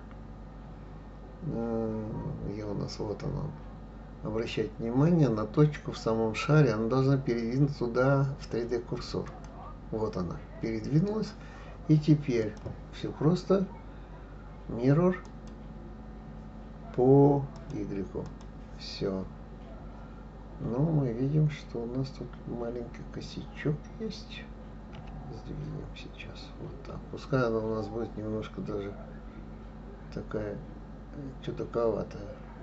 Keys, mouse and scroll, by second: 12.4-15.4 drag, 17.5 click, 18.3 click, 24.9 g.